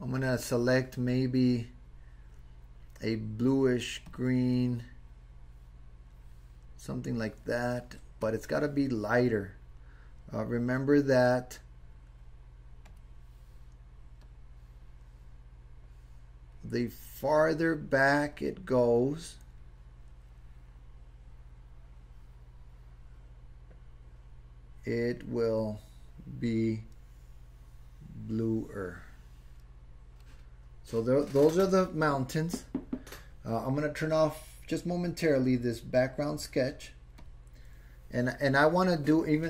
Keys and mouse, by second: 0.2 click, 8.3 click, 14.2-30.2 drag, 37.2 click.